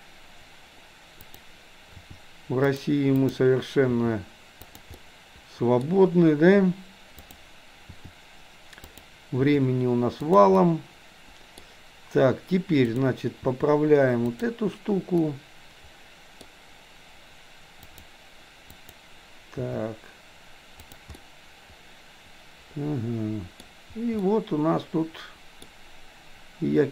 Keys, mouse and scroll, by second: 1.3 click, 2.0 r, 3.2 click, 4.0 r, 5.0 middle click, 7.2 click, 8.0 r, 9.5 r, 10.6-11.6 middle drag, 12.8 click, 13.5 r, 15.2-16.5 middle drag, 18.8 click, 19.6 r, 21.2-23.3 middle drag, 24.2-25.8 middle drag.